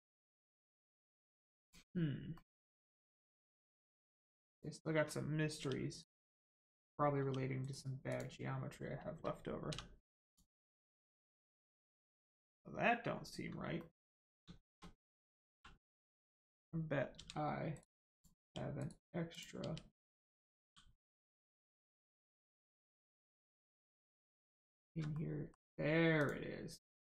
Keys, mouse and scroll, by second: 1.6 click, 2.3 middle click, 3.1 shift+middle click, 3.8 click, 3.9 click, 5.5 g, 5.9 right click, 6.3 click, 6.6 middle click, 7.1 g, 7.6 right click, 8.1 click, 10.2 click, 11.4 click, 13.0-13.3 scroll up 1, 13.7 shift+middle click, 15.1 scroll up 1, 15.5 1, 16.1 click, 17.1 g, 17.7 right click, 18.1 click, 18.3 g, 18.7 right click, 19.3 click, 19.6 g, 19.9 right click, 20.3 click, 20.5 g, 21.0 right click, 21.4 middle click, 21.9 shift+middle click, 22.7 middle click, 22.7 middle click, 23.9 shift+middle click, 25.1 middle click, 25.2 middle click, 26.1 click.